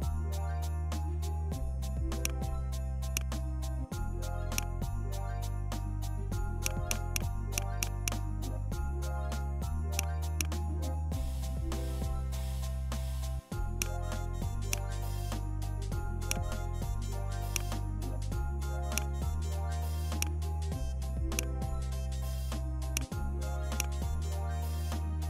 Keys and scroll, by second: 1.5 ctrl+shift+z.